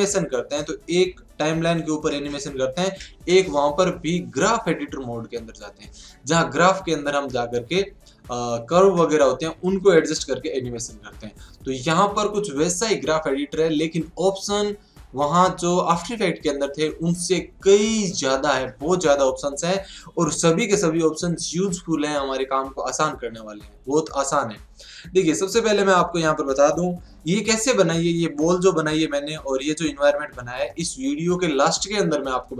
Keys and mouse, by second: 28.4-30.2 middle drag, 32.4-32.5 middle drag.